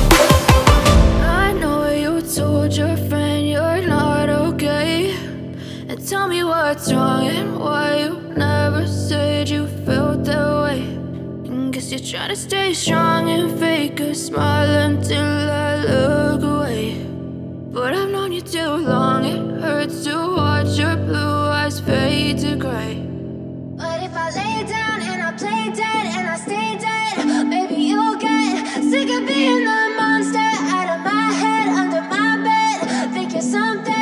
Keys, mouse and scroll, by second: 0.6 scroll down 1, 1.0 scroll up 1, 1.2 scroll down 1, 1.5-1.9 scroll up 1, 2.1 ctrl+o, 3.4 scroll down 1, 4.5 click, 5.0 click, 6.4 click, 6.9 click, 7.5 F4, 8.7 F9, 11.8 click, 12.2 ctrl+click, 14.0 click, 15.4 click, 18.1 click, 18.6 scroll up 1, 19.0 ctrl+click, 20.5 click, 20.8-21.2 scroll down 1, 21.4 scroll up 1, 21.7 click, 22.1 scroll up 1, 23.5 click, 23.7 double click, 24.1 scroll down 1, 24.3 click, 26.0 F4, 28.3 click, 30.9 click, 31.8 click, 33.0 click, 33.7 click.